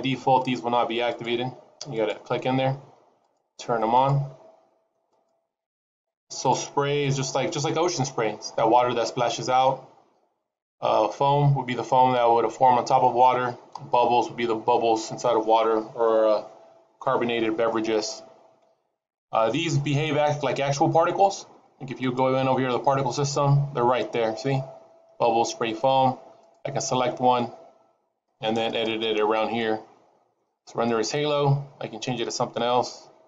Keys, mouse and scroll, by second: 1.0 click, 1.6 click, 2.7 click, 3.7 click, 4.4 click, 6.0 click, 7.1 click, 22.3 click, 27.1 click, 29.2 click, 31.2 click.